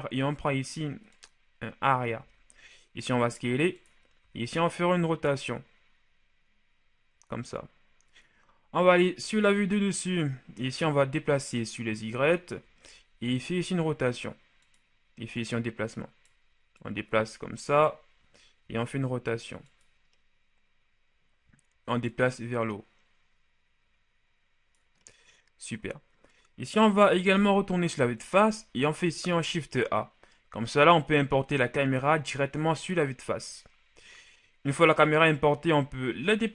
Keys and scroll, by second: 2.1 s, 4.0 r, 9.1 KP_7, 13.0 shift+r, 18.5 r, 26.8 KP_1, 29.2 shift+a.